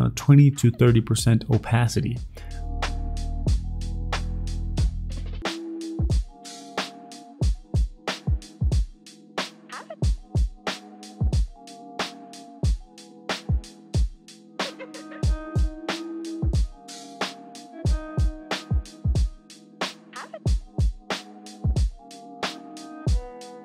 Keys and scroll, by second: 3.2 w, 3.9 ctrl+d, 6.7 ctrl+d, 13.8 v.